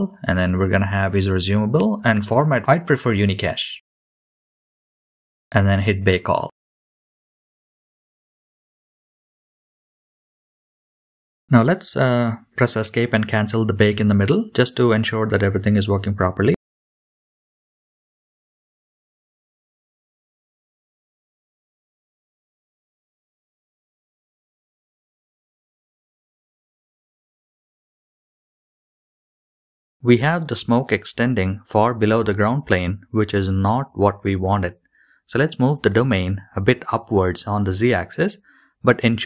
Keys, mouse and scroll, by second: 0.1-2.2 drag, 2.9-3.9 drag, 5.2-6.2 scroll down 2, 10.1-23.7 drag, 25.9 scroll up 3, 26.2 KP_Decimal, 26.6-26.9 middle drag, 27.4-28.2 middle drag, 28.3 KP_1, 29.6 click, 30.1 click, 30.6 BackSpace, 30.7 BackSpace, 31.3 BackSpace, 32.3-33.2 scroll up 4, 34.2 scroll down 4, 34.4 click, 35.0 click, 35.2 middle click, 35.2 scroll down 1, 35.2 KP_3, 36.9-37.6 scroll up 3, 39.1 g.